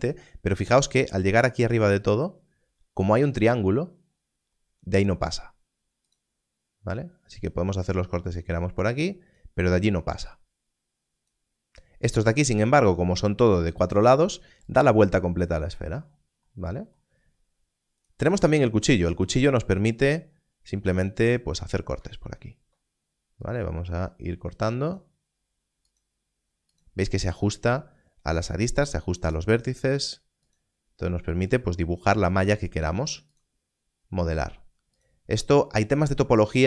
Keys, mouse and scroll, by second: 8.3 click, 14.7 click, 18.0 click, 19.3 scroll up 1, 21.9-23.4 scroll, 23.4 click, 29.3 click.